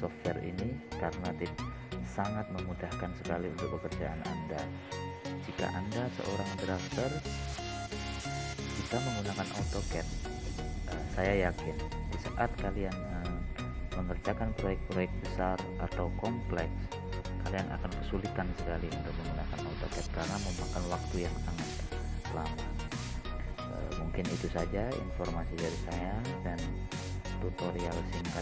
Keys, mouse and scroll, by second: 5.1-7.0 drag, 7.0-7.4 scroll up 1, 7.4-8.1 scroll down 1, 8.6 middle click, 26.1 click, 27.6 scroll up 1, 28.1 scroll down 1.